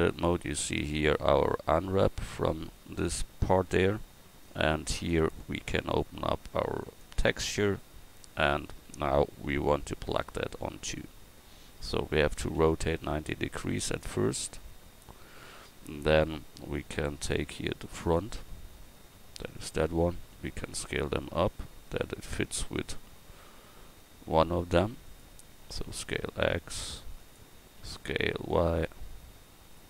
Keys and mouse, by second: 18.0-20.7 drag.